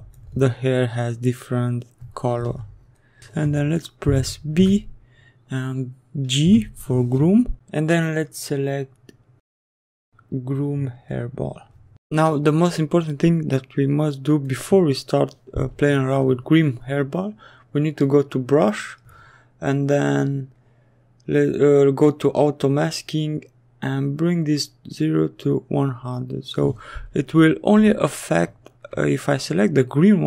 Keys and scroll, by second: 4.3 b, 6.2 g, 27.8 s.